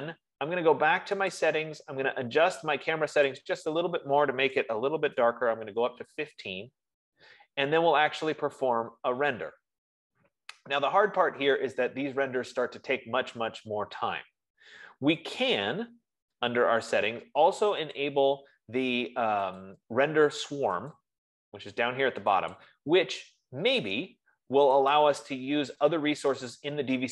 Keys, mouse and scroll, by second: 1.9 click, 3.9 click, 5.0-5.5 BackSpace, 18.6-20.1 drag, 21.3 click, 23.1 click, 25.5 click.